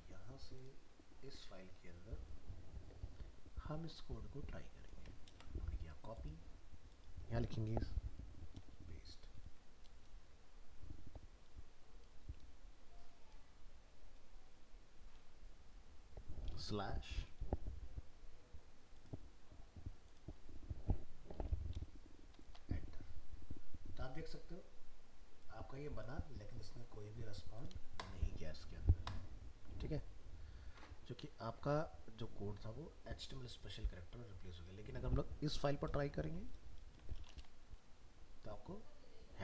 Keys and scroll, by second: 5.2 ctrl+c, 8.6 ctrl+v, 36.8 ctrl+v.